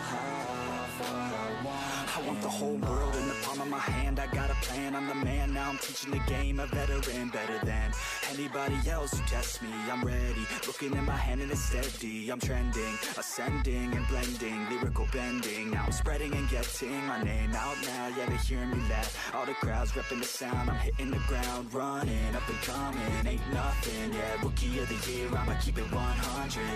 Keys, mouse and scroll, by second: 0.4-0.8 middle drag, 0.8 click, 1.8 click, 2.2 click, 2.4-3.5 drag, 5.9 click, 5.9 click, 6.6 BackSpace, 6.7 BackSpace, 9.9 BackSpace, 12.0 BackSpace, 12.1 BackSpace, 12.3 BackSpace, 13.7 drag, 14.1 click, 14.6 shift+d, 15.6 click, 16.1 click, 16.3-17.4 drag, 18.5 r, 19.5 click, 19.6 click, 25.1 click, 25.9-26.7 middle drag.